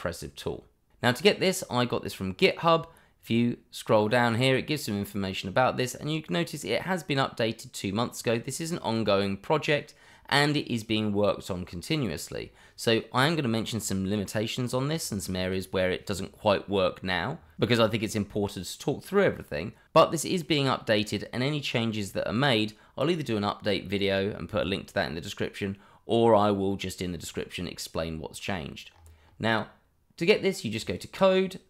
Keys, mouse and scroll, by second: 3.1-5.0 scroll down 1, 28.9-29.2 scroll up 1, 30.8 click.